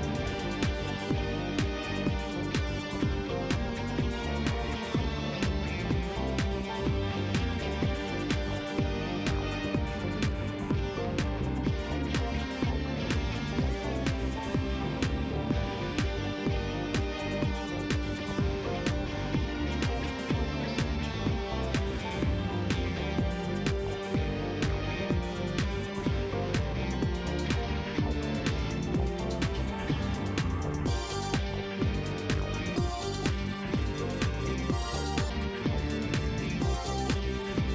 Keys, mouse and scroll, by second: 2.5 click, 3.6 shift+right click, 4.7 shift+scroll up 1, 5.5 shift+middle click, 6.0 shift+right click, 7.7 click, 8.8 click, 9.7 click, 11.0 shift+right click, 11.8 shift+scroll down 1, 12.1 middle click, 12.5 shift+right click, 13.5 shift+scroll up 1, 13.9-15.0 middle drag, 18.2 click, 20.6 shift+right click, 21.7 shift+middle click, 22.2 shift+right click, 23.4 click, 23.8 middle click, 24.2 shift+right click, 26.2 click, 27.4 shift+right click, 28.5 shift+right click, 29.4 shift+middle click, 29.8 scroll up 2, 30.8 shift+right click, 33.0-34.3 drag, 34.5 right click, 35.8 click, 37.4 click.